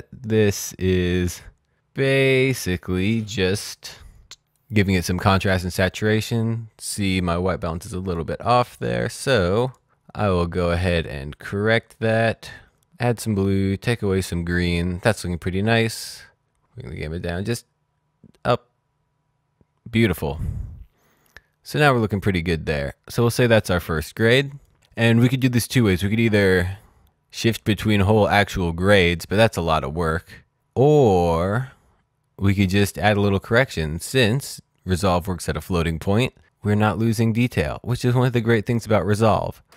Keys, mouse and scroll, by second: 4.5 click, 7.7 click, 9.1 click, 10.5 click, 11.7 click, 12.4-13.5 scroll up 1, 13.6-14.6 scroll down 1, 16.4-17.6 scroll down 1, 17.6-18.9 scroll up 1, 18.9-20.0 scroll down 1, 22.2-23.0 scroll down 1, 23.2 click, 26.9 click.